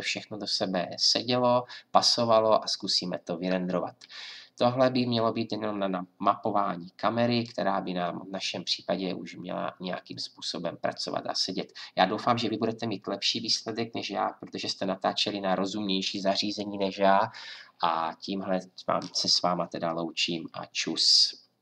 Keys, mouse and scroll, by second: 7.5 click.